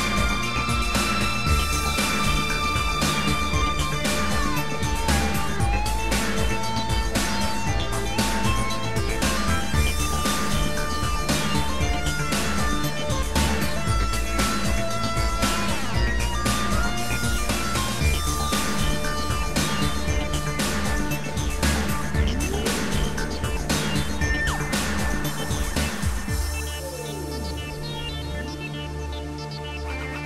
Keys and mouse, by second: 2.3 shift+click, 3.8 shift+click, 6.6 click, 12.6 click, 24.3 shift+click, 25.9 shift+click, 27.3 shift+click, 28.0 shift+click, 29.9 shift+click.